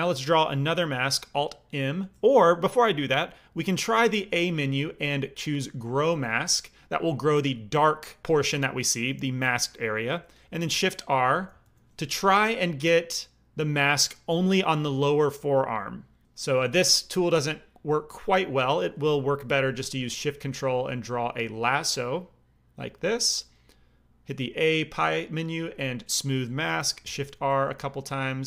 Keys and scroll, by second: 4.1 a, 10.6 shift+r, 11.0 shift+r, 11.3 shift+r, 11.6 shift+r, 19.4 alt+m, 24.2 a, 26.7 shift+r, 27.0 shift+r.